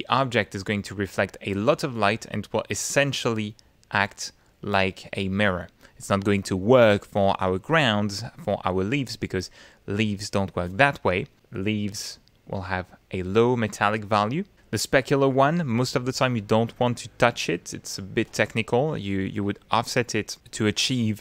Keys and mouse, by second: 0.8 middle click, 1.5 middle click, 2.2 middle click, 3.0-4.5 middle drag, 4.8 middle click, 12.1 middle click, 12.8-14.4 drag.